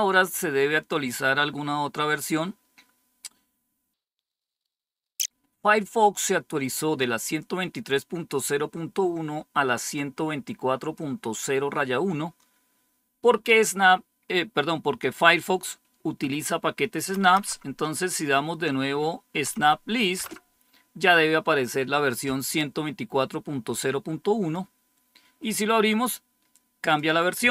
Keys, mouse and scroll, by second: 9.8-11.4 drag, 17.1 Up, 17.3 Up, 19.4 Up, 20.1 Return, 23.6 click, 26.7 click.